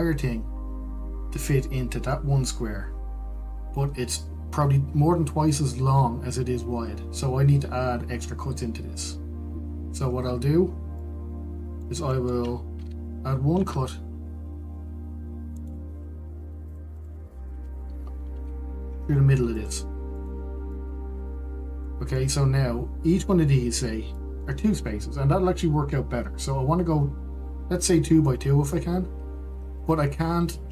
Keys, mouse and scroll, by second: 12.3-14.8 middle drag, 14.8 ctrl+r, 17.6 Tab, 18.2 click, 18.8 Tab, 19.6 ctrl+r, 22.0-30.7 middle drag.